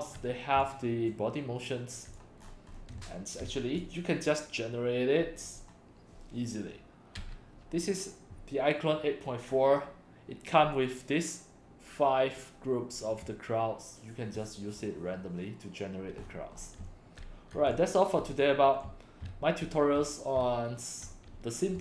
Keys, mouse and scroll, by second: 0.7 c, 0.7-2.2 drag, 2.4-2.8 scroll down 2, 3.0 x, 3.0-3.8 drag, 3.5 c, 5.4 scroll up 1, 16.2-16.7 scroll up 2, 16.6-20.4 typing, 16.9-17.6 drag, 17.7-18.4 drag, 18.8-19.8 drag, 20.1-21.0 drag.